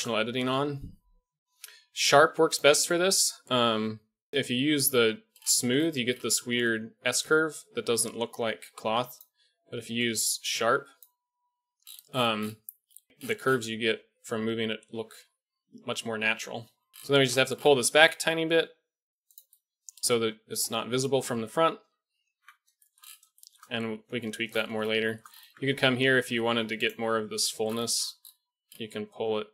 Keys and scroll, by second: 0.5 o, 4.9 g, 11.3 g, 16.6 KP_1, 16.9 g, 21.7 KP_1, 22.3 Tab, 25.4 Tab, 27.0 g.